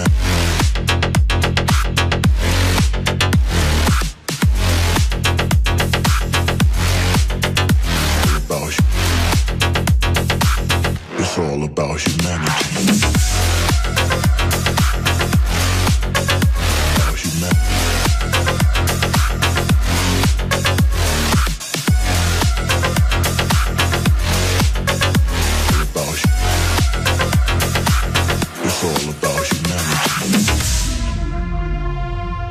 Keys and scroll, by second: 18.8 Delete.